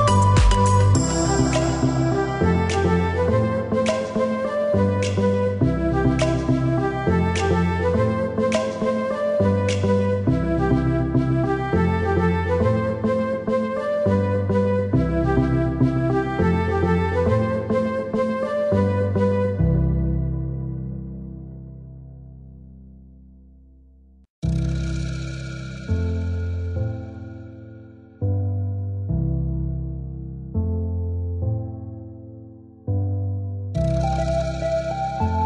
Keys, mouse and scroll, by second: 0.9 ctrl+click, 2.0 click, 3.8 click, 5.6 click, 6.6 click, 7.8 click, 9.3 click, 10.3 click, 13.0 click, 14.4 click, 15.7 click, 18.2 click, 20.2 click, 21.0 KP_3, 21.2 KP_2, 21.4 KP_Enter, 22.2 Escape, 23.8 click, 27.9 click, 29.3 click, 30.1 click, 31.2 KP_3, 31.4 KP_2, 31.8 KP_Divide, 32.1 KP_2, 32.3 KP_Enter, 33.0 KP_Enter, 33.2 Escape, 34.0 click, 35.1 click.